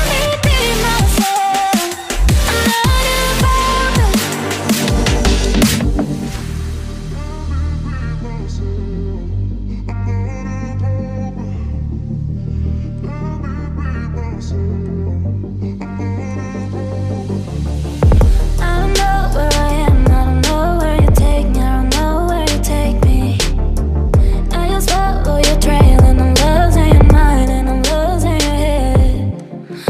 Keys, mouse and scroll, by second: 0.2 right click, 15.6 ctrl+z, 27.4 F10.